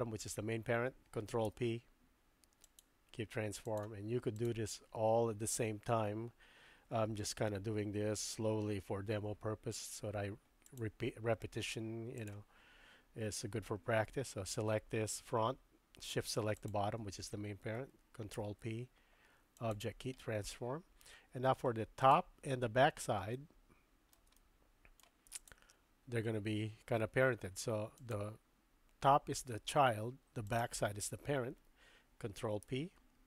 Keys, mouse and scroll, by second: 1.4 ctrl+p, 3.6 click, 10.6 click, 18.3 ctrl+p, 20.2-21.6 middle drag, 22.1 click, 23.3 shift+middle click, 24.3-25.0 middle drag, 25.4 shift+click, 28.1 click, 30.5 shift+click, 32.6 ctrl+p.